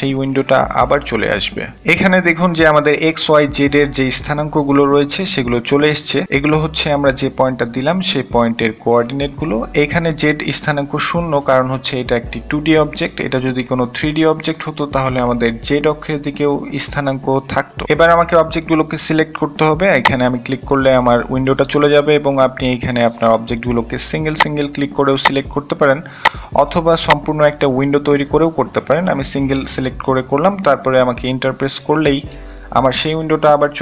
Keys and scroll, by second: 27.9-29.0 typing.